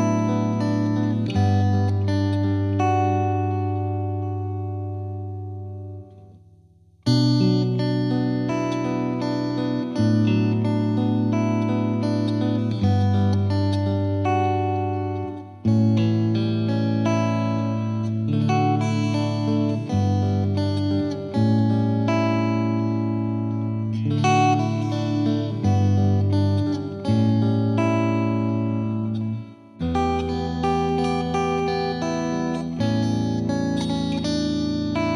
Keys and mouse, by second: 2.1 Delete, 2.8 click, 3.3 Delete, 4.7 click, 5.7 click, 6.3 click, 7.0 click, 7.5 click, 8.3 click, 8.5 click, 9.0 right click, 9.4 click, 9.5 F3, 9.8 click, 10.0 shift+click, 10.9 click, 12.1 click, 12.5 click, 12.7 click, 12.9 F3, 13.2 F2, 13.4 click, 14.5 click, 14.9 click, 15.7 click, 16.5 F2, 16.7 click, 17.1 click, 17.9 click, 18.0 click, 18.3 click, 19.1 click, 19.6 click, 20.0 F3, 21.2 click, 22.2 click, 22.9 click, 23.0 click, 23.3 click, 23.4 click, 24.1 click, 24.2 click, 24.4 click, 24.7 click, 25.6 right click, 26.0 click, 27.3 F3, 27.8 click, 28.2 F3, 28.9 ctrl+click, 29.3 click, 30.4 click, 31.8 click, 33.6-35.1 drag.